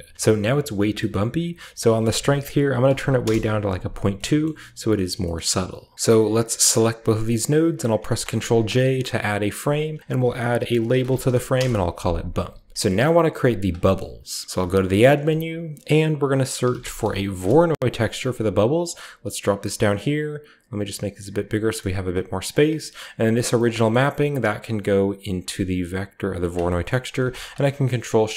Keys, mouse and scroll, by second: 0.0-0.5 scroll down 1, 0.4-0.9 middle drag, 0.5-0.9 scroll up 1, 1.1-1.9 middle drag, 1.1-1.8 scroll up 1, 1.8-3.0 drag, 1.8-2.8 scroll up 1, 3.0 typing, 3.2 Return, 4.4 middle click, 4.7-5.8 scroll down 1, 5.0 shift+middle drag, 5.3-5.8 shift+middle drag, 5.8 shift+click, 5.8 typing, 6.7 shift+click, 7.2 click, 7.7-8.5 typing, 7.9 click, 8.3-9.2 middle drag, 8.3-8.9 scroll up 1, 8.9-10.8 drag, 10.0 F2, 10.8-15.0 typing, 11.7 Return, 12.7-14.4 scroll down 1, 13.0 middle click, 13.4 click, 15.1 click, 16.3-17.1 typing, 17.3 Return, 18.7 click, 19.4 click, 20.7 click, 21.5 middle click, 21.8-23.4 scroll up 1, 21.9-22.4 drag, 22.4 middle click, 22.5 click, 23.4 middle click, 23.4-23.7 scroll up 1, 23.5 click, 24.5-25.9 middle drag, 25.9-28.3 drag, 25.9 typing, 26.5 scroll down 1, 26.7 scroll up 1, 26.8 middle click, 27.4 ctrl+shift+middle click, 27.6-28.3 ctrl+shift+scroll up 1, 27.9-28.3 ctrl+shift+middle drag.